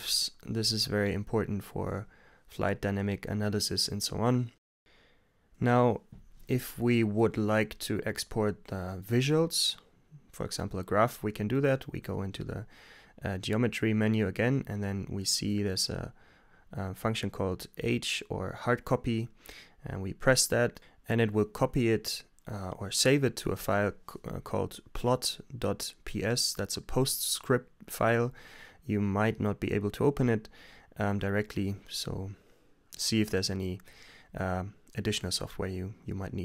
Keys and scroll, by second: 5.5 g, 6.9 Return, 8.4-9.3 typing, 18.1 shift+h, 19.4 Return, 30.0 Return, 30.7 t, 31.0 Return.